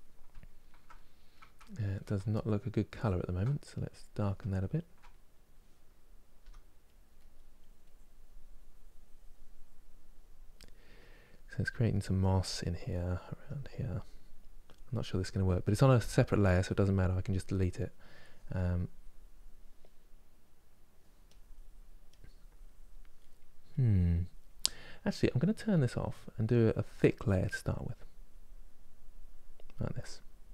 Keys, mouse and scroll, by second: 0.0-1.8 ctrl+middle drag, 1.8 ctrl+z, 2.6 ctrl+z, 3.6 click, 4.3-6.1 ctrl+middle drag, 6.1 f, 6.8 middle click, 7.2-13.3 drag, 18.2-22.9 drag, 22.9 middle click, 23.4-30.2 drag.